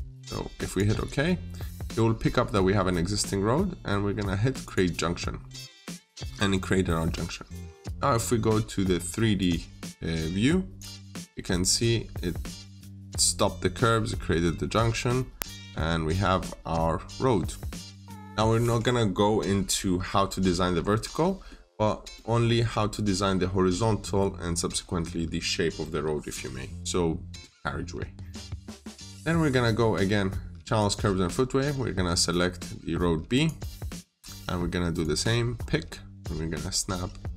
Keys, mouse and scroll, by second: 2.3-4.5 scroll up 1, 4.5 click, 5.2 scroll down 1, 5.3 middle click, 5.8-6.2 scroll up 1, 9.2 click, 11.0-11.4 scroll up 1, 11.4 middle click, 12.6-14.5 scroll up 1, 14.5 scroll down 1, 15.0 middle click, 16.1-17.2 scroll down 1, 17.9 click, 20.8 scroll down 1, 21.1 middle click, 21.7 scroll down 1, 22.0 middle click, 22.4 scroll down 1, 24.9 middle click, 28.1 scroll down 1, 28.4 middle click, 30.6 click, 35.4-35.7 scroll up 1.